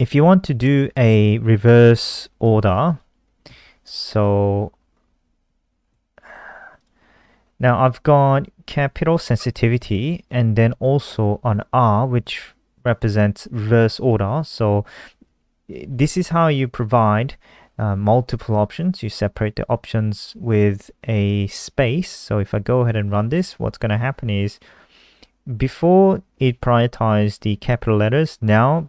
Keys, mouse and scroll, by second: 1.7 click, 2.5 ctrl+c, 2.8 click, 3.8 Return, 4.6 Left, 5.1 shift+Home, 5.3 shift+Up, 5.4 shift+Up, 5.6 shift+Up, 6.7 click, 15.6 ctrl+s, 16.2 click, 23.3 F5.